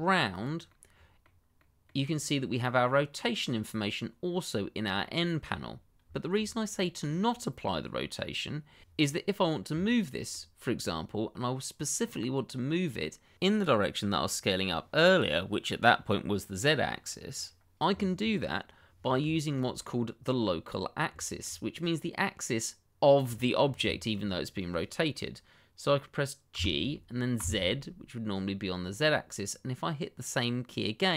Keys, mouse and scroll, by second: 0.3 click, 0.7 middle click, 5.0 shift+middle click, 5.8 scroll down 1, 6.1 shift+middle click, 6.5 middle click, 9.8 shift+middle click, 9.9 middle click, 9.9 shift+middle click, 12.0 middle click, 19.3 shift+middle click, 19.4 middle click, 19.5 shift+middle click, 19.9 middle click, 20.6-21.1 scroll up 1, 21.1 shift+middle click, 21.2 middle click, 21.3 shift+middle click, 23.3 shift+middle click, 23.4 middle click, 23.5 shift+middle click, 24.0 middle click, 24.7 shift+middle click, 26.5 g, 27.3 z.